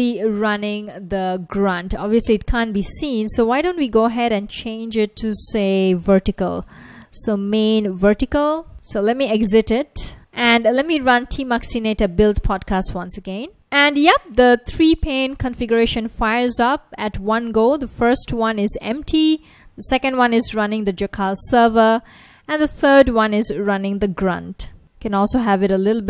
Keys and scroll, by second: 1.5 F1, 2.8 super+Tab, 7.3-9.4 typing, 12.8 Return, 18.5 F1, 20.1 F1, 21.0 F1, 22.9 F1, 24.8 super+-, 25.5 super+-.